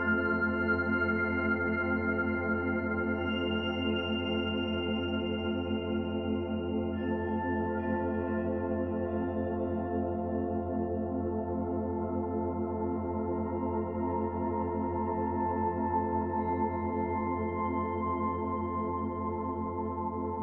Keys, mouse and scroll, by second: 14.3 click, 20.2 click.